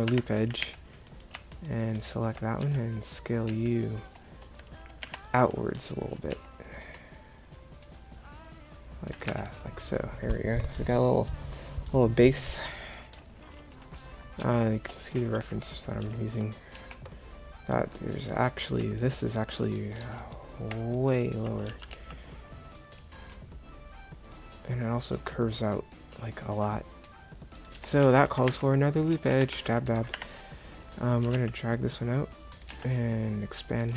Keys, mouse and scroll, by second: 0.7 a, 2.7 s, 6.4 s, 9.4 Tab, 16.1 Tab, 16.8 a, 21.7 g, 27.8 Tab, 28.1 a, 28.6 Tab, 29.2 a, 29.6 ctrl+r, 31.5 g, 32.9 s.